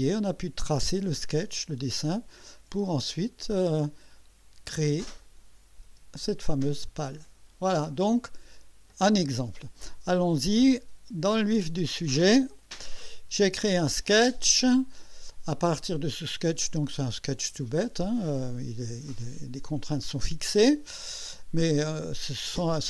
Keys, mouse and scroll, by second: 2.7 space, 3.3 scroll down 1, 5.2 click, 5.9 space, 6.7 click, 7.2 scroll down 1, 7.9-9.1 drag, 12.6 click, 13.9 click, 16.7 click, 20.7 click.